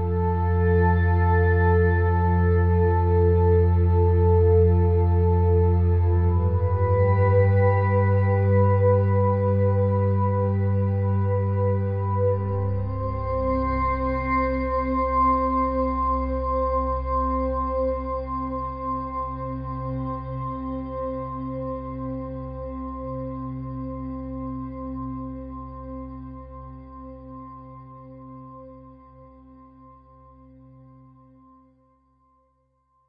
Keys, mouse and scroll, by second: 1.5 Tab, 2.5-7.9 drag, 8.0 middle click, 13.4-17.2 drag, 17.2 KP_3, 19.0-20.8 drag, 23.9-25.7 drag, 25.9-28.4 middle drag, 28.9-30.7 drag, 31.5 KP_1.